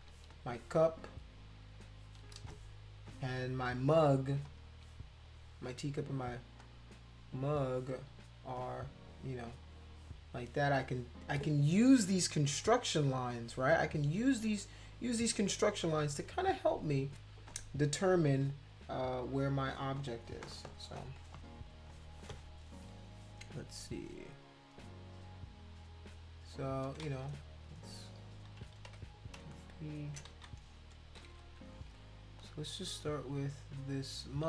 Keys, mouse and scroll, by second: 4.4 click, 6.6 shift+click, 20.5 KP_Add, 25.4-26.5 drag, 27.0 shift+z, 27.6 click, 28.9 b, 29.4 space, 29.5 click, 30.3 ctrl+z, 31.2 ctrl+-, 31.3 ctrl+-, 33.7 click, 33.8 click.